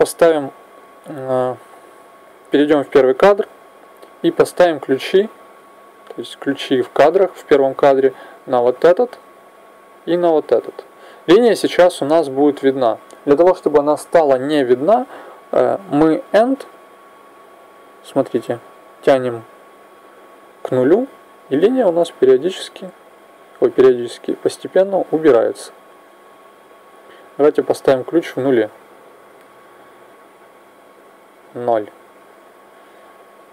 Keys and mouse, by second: 1.6-8.8 middle drag, 8.8 i, 10.2 i, 15.9 click, 31.4 KP_0.